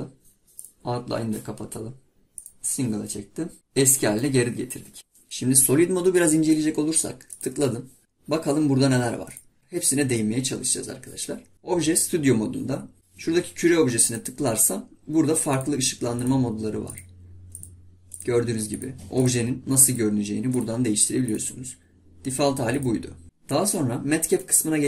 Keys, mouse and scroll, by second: 3.6 scroll up 2, 3.7-4.1 scroll down 1, 4.2-5.0 middle drag, 7.4 click, 9.3 click.